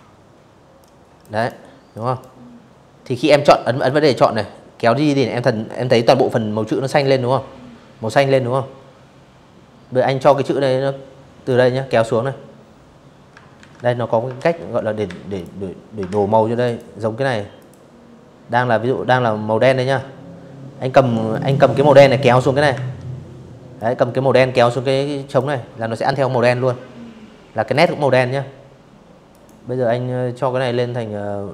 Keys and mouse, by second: 0.8 click, 1.4-5.9 drag, 8.0-9.1 drag, 11.2 ctrl+1, 12.0 ctrl+z, 13.0 click, 13.7 ctrl+z, 14.3 click, 15.2 click, 17.4 ctrl+1, 19.0 click, 20.4 Escape, 21.4 click, 25.4 click, 27.0 click, 29.4 click, 31.0 click.